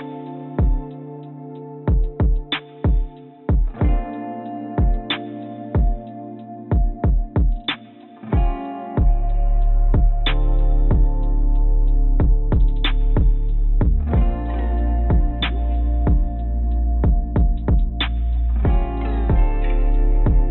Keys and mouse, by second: 1.0 s, 9.9 shift+g, 10.7 click, 11.3 g, 14.1 click, 14.7 click, 15.8 click, 16.8 click, 17.9 g, 19.5 click, 19.9 click.